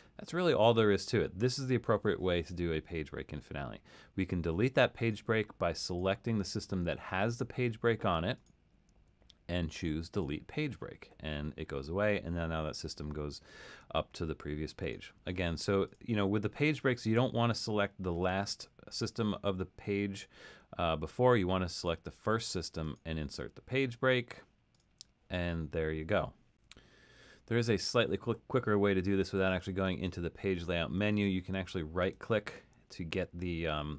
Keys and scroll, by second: 27.6 super+z.